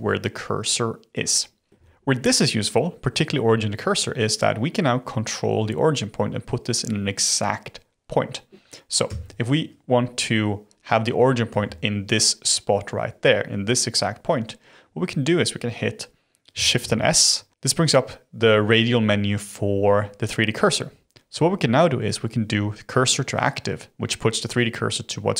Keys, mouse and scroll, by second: 1.4-4.6 scroll up 2, 9.0 Tab, 11.4 1, 12.1 click, 16.7 shift+s.